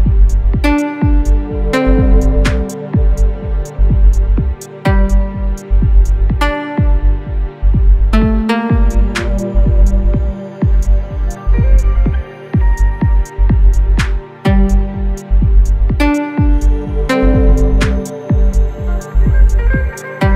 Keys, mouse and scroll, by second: 0.1 ctrl+space, 1.6 click, 6.4-8.6 drag, 8.6 1, 10.4 click, 19.1 click.